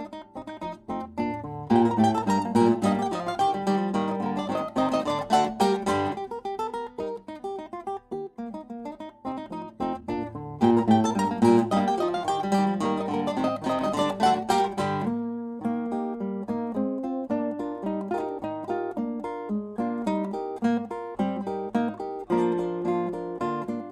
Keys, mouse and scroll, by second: 1.2-4.0 middle drag, 6.1-10.6 drag, 10.6-12.6 middle drag, 16.8-19.1 drag, 21.5-23.9 drag.